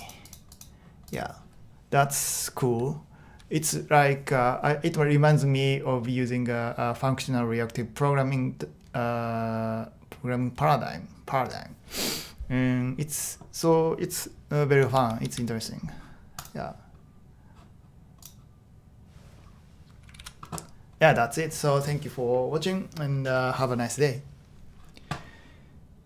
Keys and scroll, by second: 14.9-15.3 typing, 20.2 super+h.